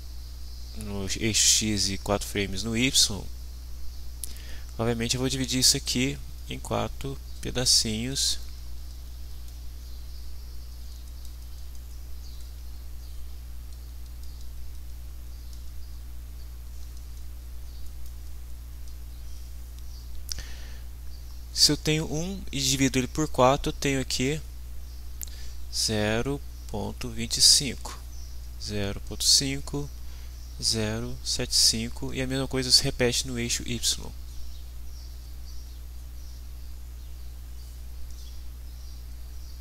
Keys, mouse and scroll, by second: 3.8 click, 5.0-13.0 drag, 13.3-19.2 drag, 19.4 click, 19.8-23.2 drag, 23.5 click, 25.4 click, 26.0-33.7 drag, 33.9 click, 34.2-38.7 drag, 39.1-39.6 drag.